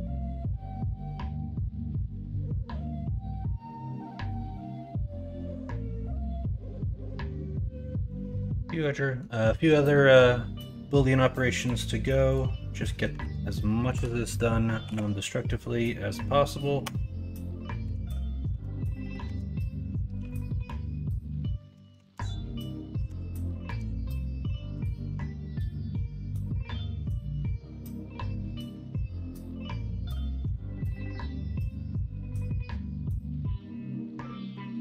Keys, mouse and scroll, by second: 0.5 s, 3.6 g, 6.6-8.8 drag, 8.8 middle click, 9.6 middle click, 19.2-21.9 drag, 19.2 BackSpace, 20.2 m, 22.0 ctrl+z, 24.2 middle click, 26.7 middle click, 29.5 middle click, 30.4 s, 33.5-34.8 drag.